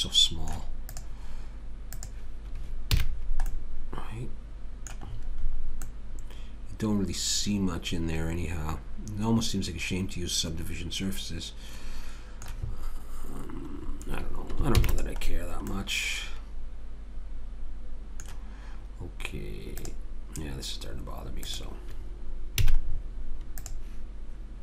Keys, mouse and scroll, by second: 0.9-3.6 drag, 3.0 a, 5.1 middle click, 13.9 middle click, 14.8 ctrl+s, 19.9 click, 22.6 a.